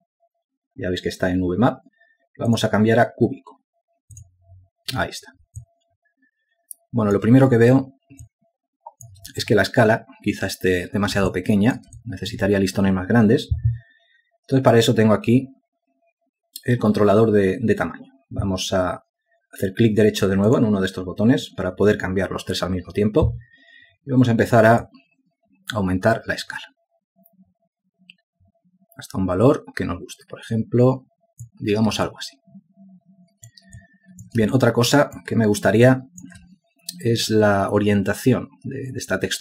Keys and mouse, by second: 7.3 alt+click, 9.9 ctrl+alt+click, 13.0 alt+shift+click, 13.8 ctrl+alt+click, 33.8 alt+click, 35.5 ctrl+alt+click, 36.3 alt+shift+click, 37.7 ctrl+alt+click.